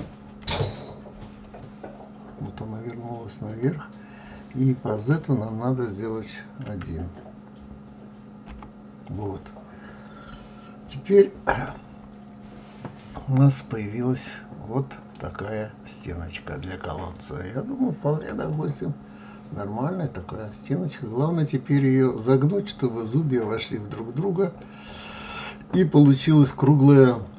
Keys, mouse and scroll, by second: 5.1 click, 11.8-14.8 middle drag, 15.6 scroll down 2, 16.2-16.7 scroll up 1, 17.3 scroll up 3, 17.3-18.6 scroll down 1, 18.6-21.7 middle drag.